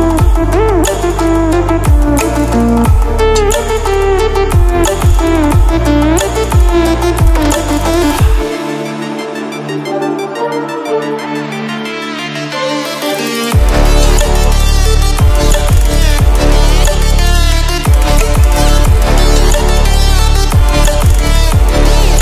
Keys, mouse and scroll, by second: 2.2-5.0 typing, 6.4 click, 11.7 click, 16.7 click, 22.0-22.2 drag.